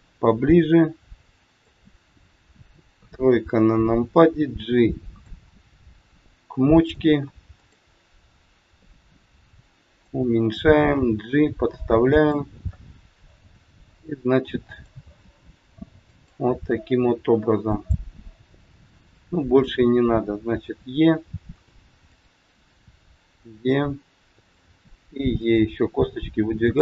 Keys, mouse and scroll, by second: 2.9 KP_3, 3.7 scroll up 3, 4.7 click, 5.9 click, 8.7 click, 11.0 g, 13.3 e, 15.1 e, 19.4 click, 20.6 e, 21.9 click, 22.8 e, 24.5 click, 24.8 e, 26.6 click.